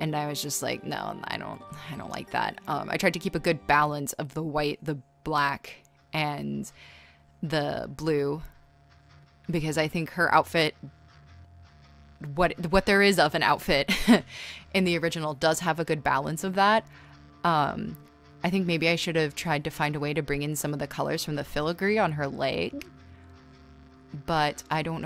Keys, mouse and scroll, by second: 0.0-0.7 typing, 2.5 z, 5.9 z, 9.4 z, 11.4-13.5 scroll, 13.5 right click, 13.8 space, 16.2 space, 16.5 space, 16.8 space, 19.2 space, 21.0-23.1 typing, 22.8 scroll.